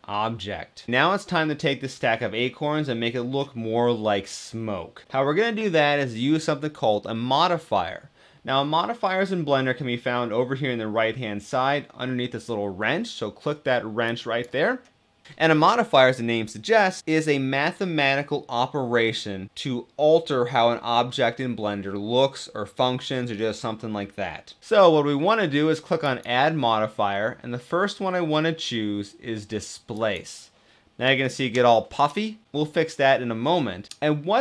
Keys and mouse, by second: 13.7-15.3 drag, 25.9 click.